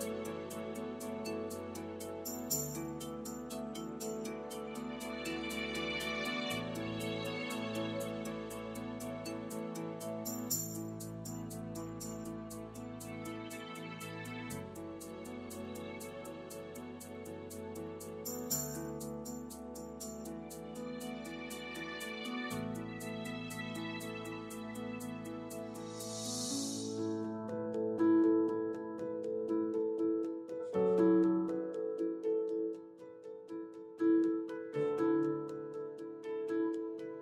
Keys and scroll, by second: 17.2 shift+BackSpace, 20.5 shift+BackSpace, 30.9 3.